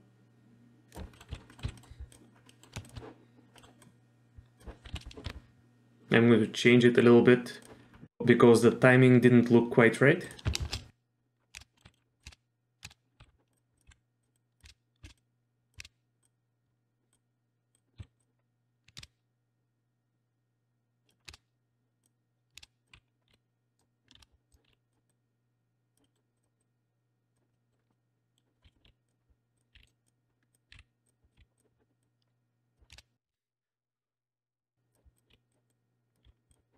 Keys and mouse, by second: 1.3 z, 1.5 middle click, 1.6 z, 1.8 middle drag, 2.5 middle click, 2.8 shift+click, 3.6 middle click, 3.8-4.6 drag, 4.9 KP_3, 5.3 r, 10.3 click, 10.6 shift+space, 11.8-15.8 typing, 13.5 click, 13.7 click, 14.3 drag, 15.2-15.7 drag, 16.2 click, 17.1 click, 18.0 z, 18.2 drag, 19.0 shift+space, 19.0-21.1 drag, 21.3 shift+space, 22.0 click, 22.6-24.7 typing, 22.6 click, 25.1 click, 26.0 middle click, 26.4 click, 26.6-27.3 drag, 27.5 middle click, 27.9-28.3 middle drag, 28.6 KP_3, 28.8 r, 30.1 r, 30.5 click, 30.7 r, 31.4 r, 32.0-32.7 drag, 32.9 shift+space, 33.3 shift+space, 33.4-34.9 drag, 35.1 click, 35.3 r, 35.7 click, 36.2 r.